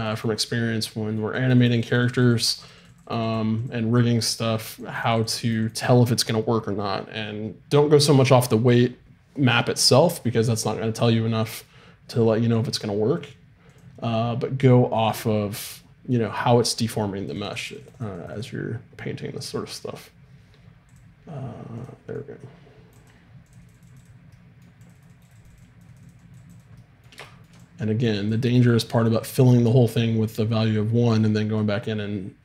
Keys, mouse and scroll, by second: 0.5-2.3 middle drag, 4.2-7.6 drag, 13.7-15.7 drag, 15.7 middle click, 16.8-31.6 drag, 24.3 right click, 26.8 middle click, 31.6 middle click.